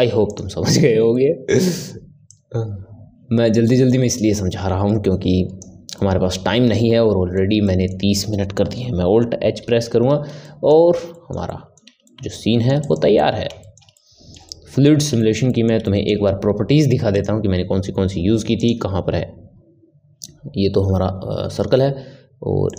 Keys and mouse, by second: 0.2 click, 1.1-2.2 middle drag, 2.2-5.2 drag, 6.0-9.6 middle drag, 9.6 alt+h, 10.4-12.8 ctrl+middle drag, 12.8 click, 13.1-17.1 middle drag, 17.1 click, 18.5 click, 22.6 click.